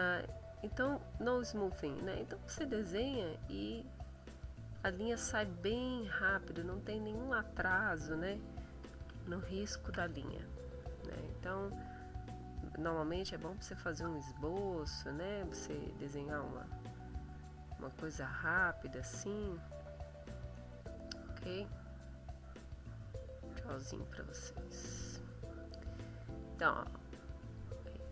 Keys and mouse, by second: 1.5-2.8 drag, 3.1-4.5 drag, 4.7-6.2 drag, 6.6 click, 9.1 ctrl+z, 11.2 click, 12.5-15.7 drag, 17.2 click, 17.7 click, 18.1-19.7 drag, 19.8 click, 20.5-24.0 drag, 24.2-25.8 drag, 27.0 click.